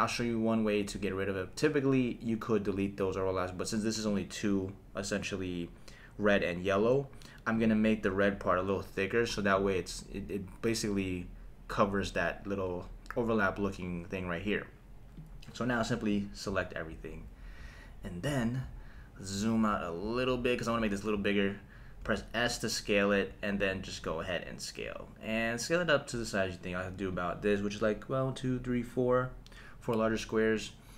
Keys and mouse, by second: 4.2-7.2 drag, 7.5 click, 9.3 click, 15.4 click, 22.0 s, 27.1 click.